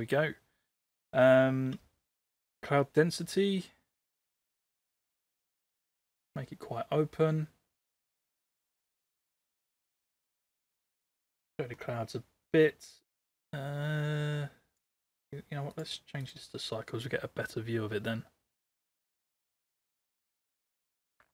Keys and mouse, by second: 2.7-6.3 drag, 7.9-11.2 drag, 13.0-14.8 drag, 15.7-16.3 drag.